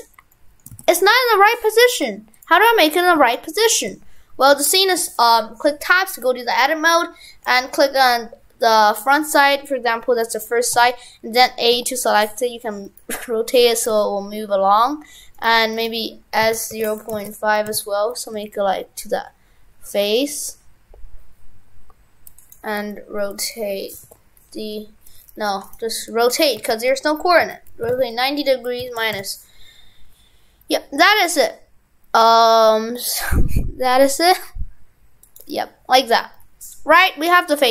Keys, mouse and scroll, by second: 0.4 middle click, 0.7 shift+f, 2.6-3.1 scroll down 1, 3.4 shift+middle click, 4.6 b, 5.7 b, 8.9-10.6 scroll down 1, 25.7 right click, 36.4-37.3 scroll up 1.